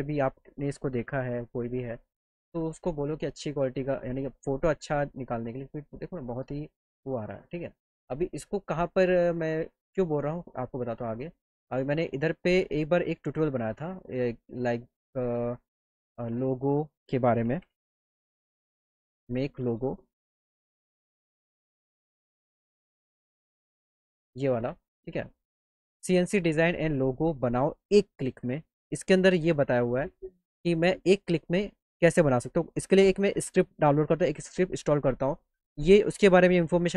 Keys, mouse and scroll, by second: 9.6 click, 11.5 click, 12.7 click, 14.3 click, 15.8 click, 24.2 middle click.